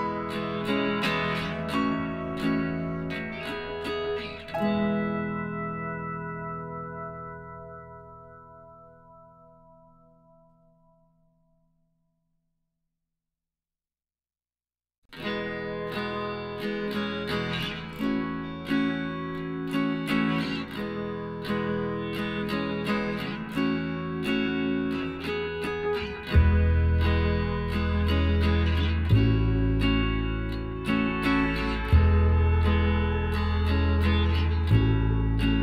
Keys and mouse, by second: 1.8 k, 4.9 click, 5.7-7.6 middle drag, 6.9 k, 10.1-11.8 middle drag, 11.8-13.7 right drag, 13.7 g, 17.1 ctrl+z, 18.6-20.4 drag, 19.4-20.5 right drag, 19.8 middle click, 21.9 KP_1, 22.6 z, 23.4 z, 23.8-27.0 middle drag, 26.5 g, 30.1-31.8 drag, 30.9-33.5 right drag, 32.8 g, 34.8-35.6 middle drag.